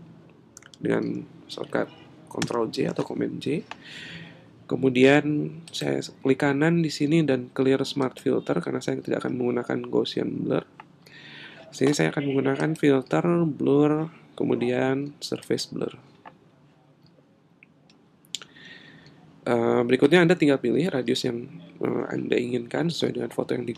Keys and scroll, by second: 2.4 super+j.